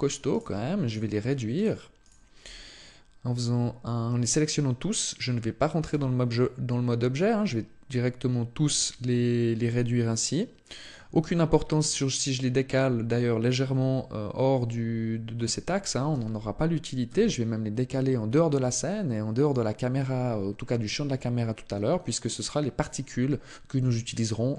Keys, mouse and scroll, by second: 0.1 right click, 0.7 shift+right click, 5.7 s, 10.7 click, 11.0-12.2 scroll down 1, 15.9 g, 19.3 click, 23.7 shift+middle click.